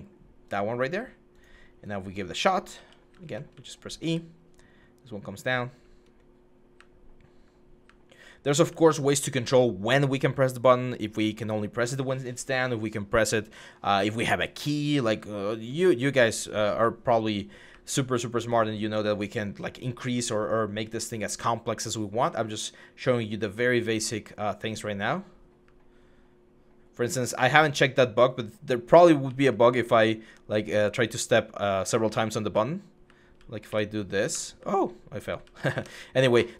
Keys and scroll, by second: 2.1-3.9 typing, 5.9-7.7 typing, 10.5 w, 14.0-15.3 typing, 16.6 a, 17.5 w, 18.7 s, 19.3 w, 20.1 w, 22.6-23.2 typing, 25.4-27.8 typing, 28.8-29.8 typing, 32.3-34.1 typing, 35.2 d, 35.6 Escape.